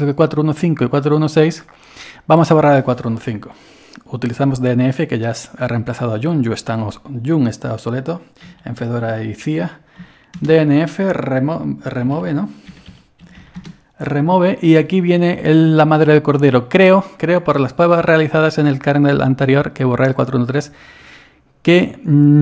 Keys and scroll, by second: 8.5-10.0 typing, 11.8-13.9 typing.